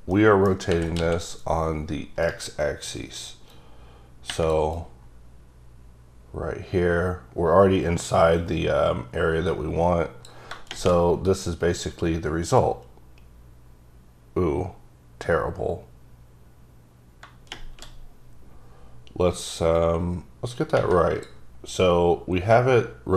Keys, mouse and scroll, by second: 0.8 r, 1.1 x, 2.4 right click, 3.6 click, 4.9 click, 19.9 click.